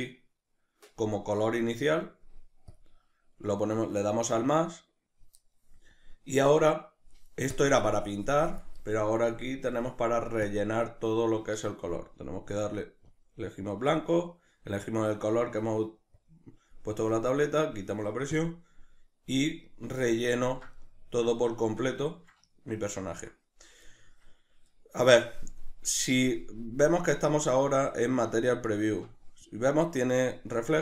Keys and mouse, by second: 19.7-29.7 ctrl+middle drag, 29.7-30.8 drag.